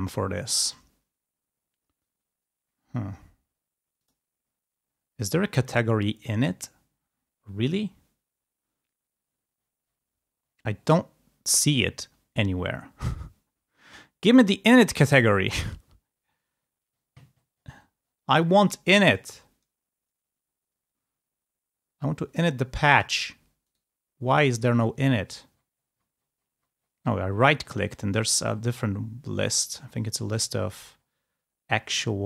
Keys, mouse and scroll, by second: 3.9 click, 7.1-7.5 scroll up 2, 8.1-9.0 scroll down 2, 9.2-10.9 scroll down 4, 12.3 scroll up 1, 13.5 scroll down 1, 16.9-18.6 scroll up 2, 22.9 click, 23.7 right click, 25.3-27.8 scroll down 3, 27.9-31.3 scroll up 5, 32.0 click.